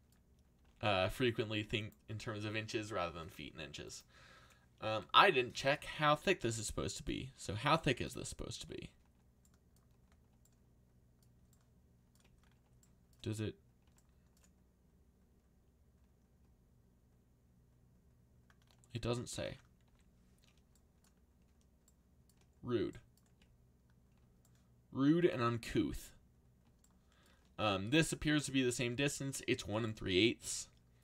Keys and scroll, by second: 0.3-1.1 typing, 19.8 z.